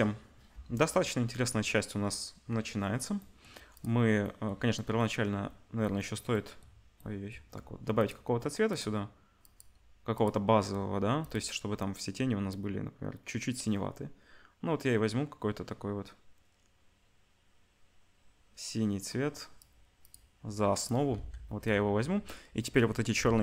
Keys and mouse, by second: 3.7 click, 11.2 click, 20.7 click, 21.2 ctrl+s, 23.2 shift+a.